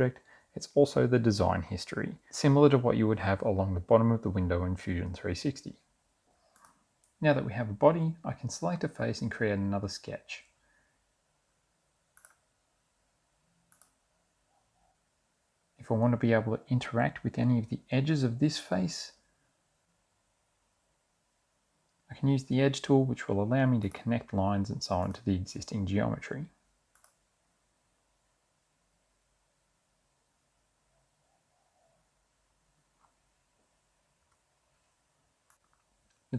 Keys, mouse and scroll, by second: 6.8 click, 12.2 click, 13.8 click, 21.4 click, 21.9 click, 23.1 click, 29.3 click, 29.9 Escape, 30.6 click, 32.1 click, 33.7 click.